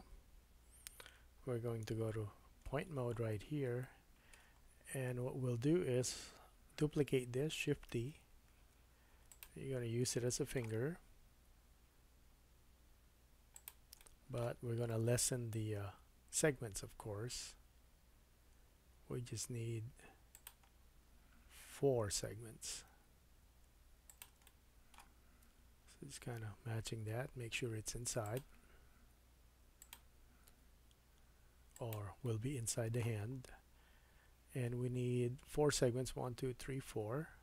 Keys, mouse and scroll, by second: 0.0 middle click, 0.0 click, 1.8 KP_1, 2.8-3.6 scroll up 5, 3.8 shift+middle click, 4.6-17.0 middle drag, 4.6-6.1 scroll up 2, 7.9 shift+d, 11.3 s, 14.9 g, 20.7-22.9 scroll up 4, 22.9 s, 24.5 shift+middle click, 25.5 g, 29.2 s, 30.5 g, 32.2 middle click, 33.3-34.0 scroll down 5, 33.7-37.4 middle drag, 35.2-36.9 scroll up 3, 37.2 Tab.